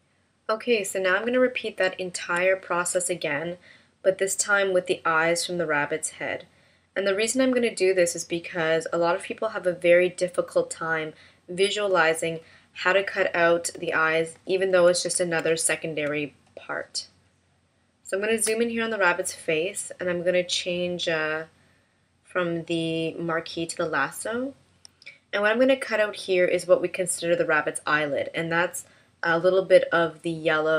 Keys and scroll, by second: 2.7 shift+m, 14.2 super+=, 16.1 space.